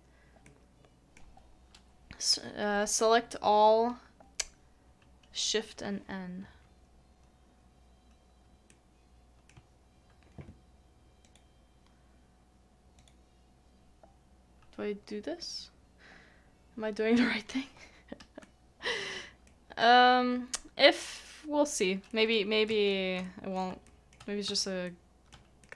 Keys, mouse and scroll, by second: 0.4 middle click, 5.8 middle click, 8.6 n, 8.7 middle click, 18.4 middle click, 22.1 middle click, 23.2 middle click, 23.8 shift+middle click, 24.4 shift+middle click, 24.8 shift+middle click.